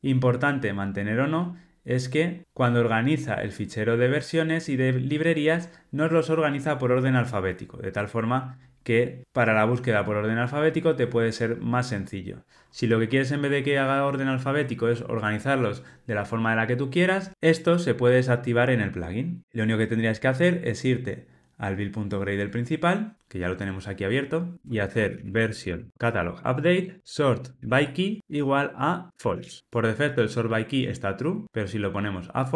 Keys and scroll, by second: 26.0 Return.